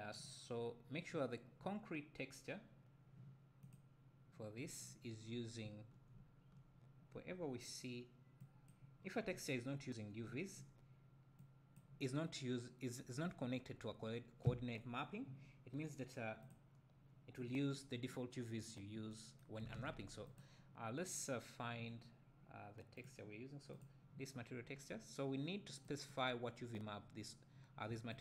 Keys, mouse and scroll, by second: 0.5-1.0 scroll up 2, 3.7 click, 8.4 click, 11.4 click, 20.4 click, 23.7 click, 25.9 click, 28.1 click.